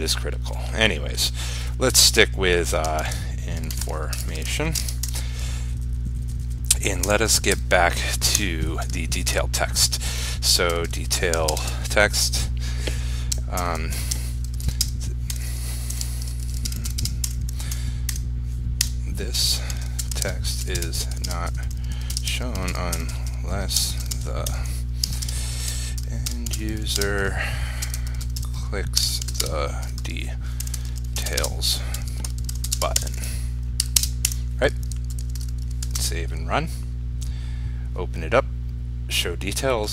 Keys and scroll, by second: 11.7 ctrl+space, 35.4 ctrl+s, 36.1 ctrl+r.